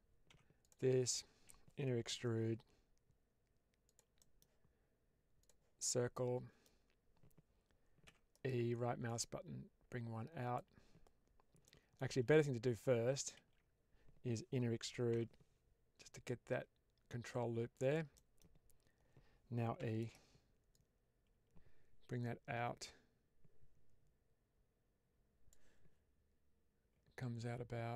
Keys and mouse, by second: 3.8 click, 4.1 middle click, 5.3 click, 5.7 middle click, 7.9 e, 8.2 right click, 9.0-10.4 drag, 11.5 middle click, 12.0 ctrl+z, 13.4 ctrl+z, 18.0 middle click, 19.7 e, 19.9 right click, 20.6-25.4 drag.